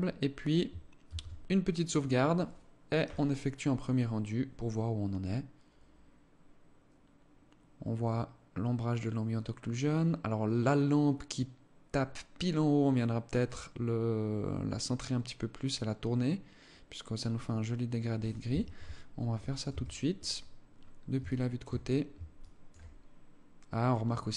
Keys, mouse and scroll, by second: 0.5 ctrl+s, 18.1 Escape, 19.1 KP_3, 20.3-20.7 scroll down 3, 20.7 alt+shift+click, 21.3 scroll down 2, 21.5 scroll up 1, 21.9 alt+shift+click, 22.4-23.0 scroll down 5, 23.6 right click, 23.9 scroll up 5.